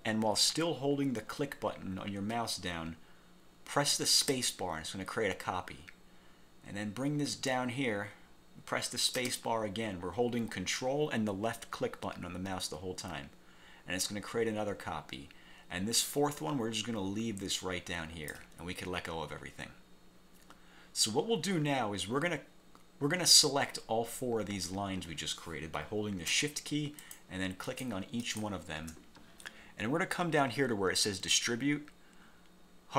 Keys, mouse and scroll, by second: 4.3 ctrl+space, 9.3 ctrl+space, 27.1 shift+click, 27.8 shift+click, 28.3 shift+click.